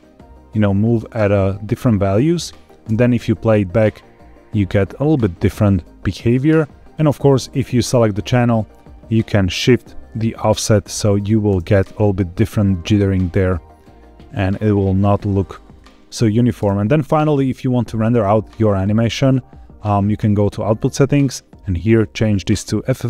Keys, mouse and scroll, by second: 2.5 click, 2.8 space, 6.8 space, 7.5 click, 9.7-11.2 drag, 11.4 space, 15.3-15.7 scroll up 1, 15.8 shift+middle click, 16.5 space, 20.1 click, 21.8-22.5 drag.